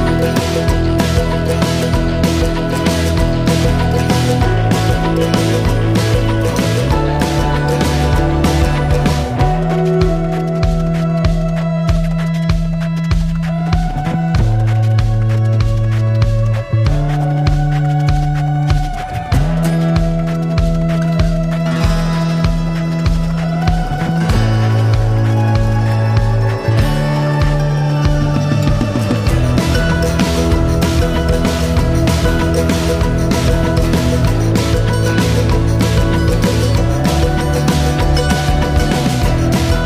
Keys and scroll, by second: 3.7 ctrl+s, 6.8 a, 19.6 Tab, 23.0-23.6 typing, 27.7 ctrl+b, 27.8 ctrl+g, 35.6 Tab.